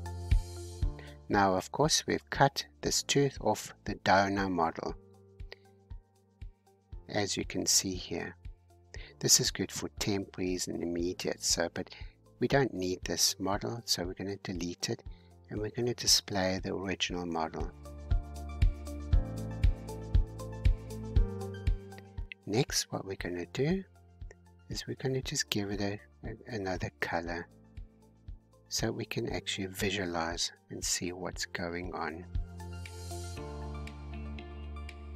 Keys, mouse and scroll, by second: 1.8-2.9 middle drag, 2.9 scroll down 2, 4.5-6.5 drag, 6.5 h, 7.4-9.2 middle drag, 9.2 ctrl+z, 10.0-12.5 drag, 12.5 x, 15.5-18.9 drag, 18.9 scroll down 2, 19.3-23.5 middle drag, 23.5 click, 24.1-27.1 middle drag, 27.1-29.5 scroll up 10, 29.5-30.3 scroll up 6, 30.3 scroll up 3, 31.2-35.0 drag.